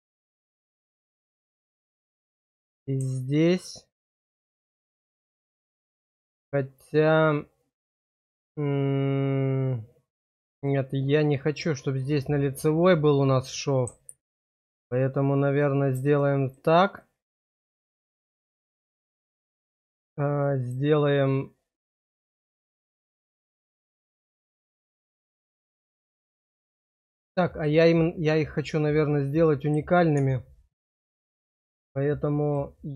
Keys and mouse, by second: 0.6 shift+middle click, 1.2 middle click, 2.2 click, 2.4 click, 15.6 click, 16.1 shift+click, 17.0-18.3 middle drag, 18.5 shift+click, 19.1 click, 19.7 shift+click, 20.4 click, 23.6 click, 27.6-29.7 drag, 30.6 click, 32.4 click.